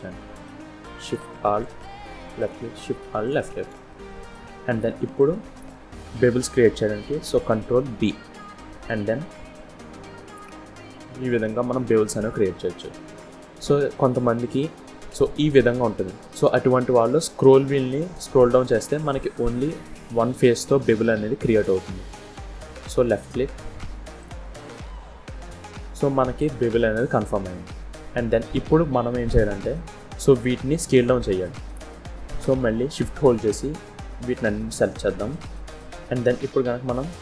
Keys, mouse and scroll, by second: 0.9 alt+shift+click, 1.8 middle click, 3.0 alt+shift+click, 3.8 middle click, 5.4 middle click, 7.8 ctrl+b, 22.9 middle click, 27.8 scroll up 2, 28.0 shift+scroll down 1, 28.2 shift+middle click, 29.0 middle click, 30.4 click, 33.0 shift+click, 34.1 shift+click, 35.1 shift+click, 36.7 s.